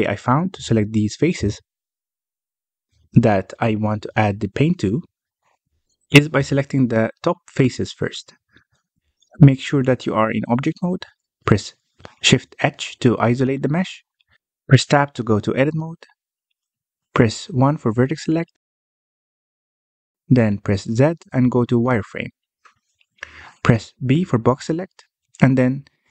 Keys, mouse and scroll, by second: 0.8-2.4 middle drag, 2.4 scroll up 2, 3.4 shift+middle click, 4.0-7.0 scroll down 1, 7.7 3, 8.0 click, 9.1 click, 9.6 click, 10.6-11.8 middle drag, 11.8 alt+a, 13.8 Tab, 15.3-16.5 middle drag, 16.5 Tab, 16.9 Tab, 17.4 alt+a, 17.7-18.4 middle drag, 18.4-18.8 scroll up 1, 18.8 1, 19.3 shift+middle click, 20.2 z, 22.2 b, 23.0 b, 23.9 b, 25.3 scroll down 1, 25.6 middle click.